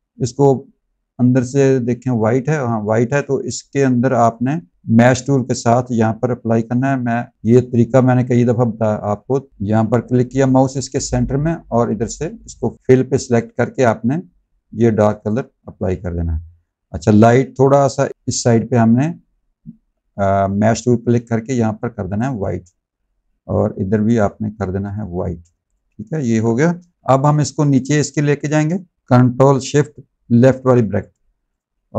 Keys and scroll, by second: 26.6 v, 28.9 v.